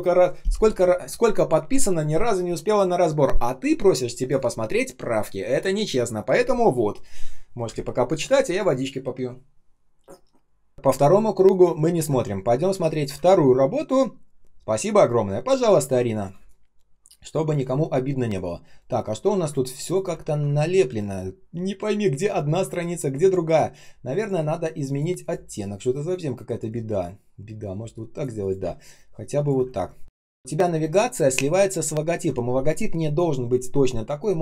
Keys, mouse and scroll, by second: 11.9 ctrl+ц, 12.7 space, 13.1 ctrl+scroll up 1, 14.8 ctrl+scroll down 1, 16.2 space, 16.7 space, 16.8 space, 18.2 ctrl+shift+3, 19.0 ctrl+scroll down 1, 19.4-21.0 typing, 20.1 ctrl+scroll up 1, 22.3 ctrl+scroll down 1, 22.6 space, 28.5 space, 29.0 space, 29.6 ctrl+scroll up 1, 31.6 ctrl+click.